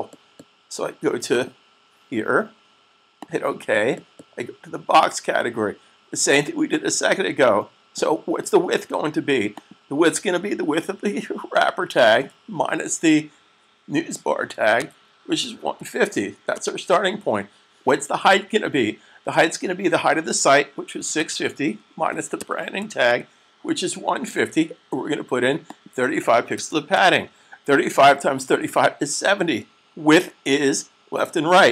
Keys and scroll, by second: 11.4-12.2 typing, 13.9-15.6 typing, 20.9-23.0 typing, 26.1-26.8 typing.